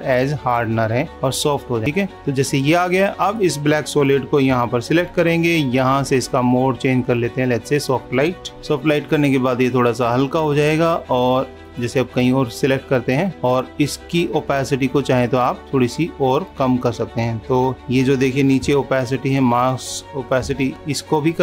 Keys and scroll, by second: 8.5 super+=, 20.7 super+=.